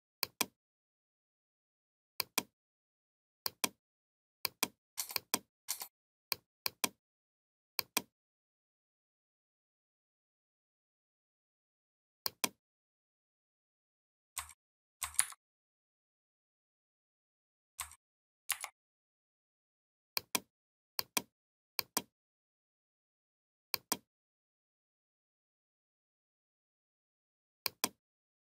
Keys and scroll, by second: 15.0 ctrl+c, 18.3 ctrl+f.